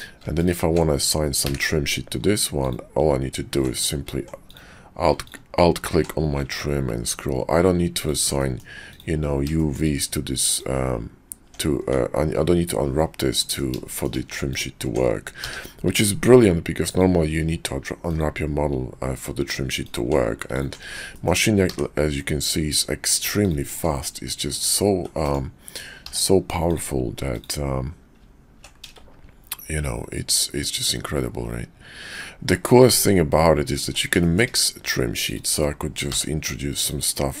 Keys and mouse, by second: 0.4 alt+click, 1.4 d, 8.4 middle click, 8.9 click, 9.5 shift+middle click, 10.5 click, 11.4 Tab, 11.7 Tab, 13.4 click, 13.9 shift+click, 14.5 alt+click, 15.4 d, 21.1 shift+click, 21.7 d, 25.9 d, 34.2 shift+click, 35.9 d.